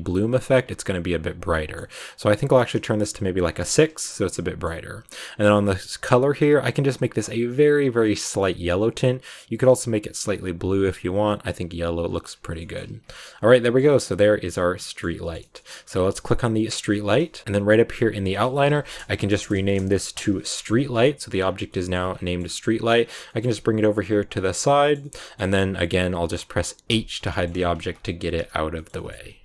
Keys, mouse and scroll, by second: 0.5 click, 1.4-2.4 middle drag, 2.4-3.5 drag, 3.8 scroll down 1, 3.8-5.4 middle drag, 5.4 click, 12.2 scroll down 5, 12.4 a, 12.5 middle click, 12.7 ctrl+s, 12.9 scroll down 2, 13.0 middle click, 13.7 scroll up 1, 13.8-14.9 middle drag, 14.9 scroll down 2, 15.1 shift+middle click, 15.5 scroll up 2, 15.6 ctrl+s, 16.1 right click, 17.4-18.1 scroll up 7, 18.1 click, 18.2-19.3 drag, 19.3 BackSpace, 19.4 BackSpace, 21.3 scroll up 1, 21.3 scroll down 2, 21.5 shift+middle click, 21.9 scroll up 1, 22.0 scroll down 1, 22.1 middle click, 22.9 scroll down 2, 23.1 g, 24.7-26.8 shift+middle drag, 26.8 h, 27.2 shift+middle click, 27.4 scroll up 2, 27.6 ctrl+s, 28.0 shift+middle click, 28.3 z, 28.7 shift+middle click, 29.2 ctrl+s.